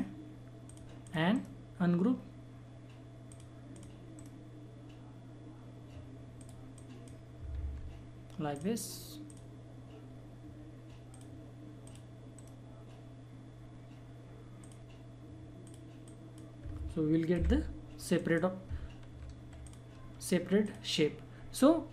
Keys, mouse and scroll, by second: 1.3 right click, 3.3 click, 4.1 right click, 6.4 click, 7.5 ctrl+z, 8.5 click, 12.1 click, 12.3 right click, 14.5 click, 17.3 Delete, 18.1 click, 19.6 shift+click, 20.6-21.9 drag.